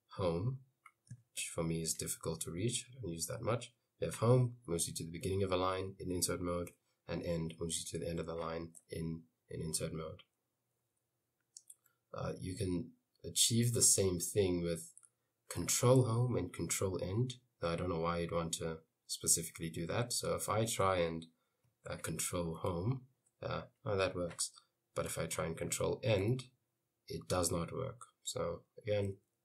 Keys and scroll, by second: 1.5 Home, 6.8 End, 22.7 ctrl+Home, 26.3 ctrl+End.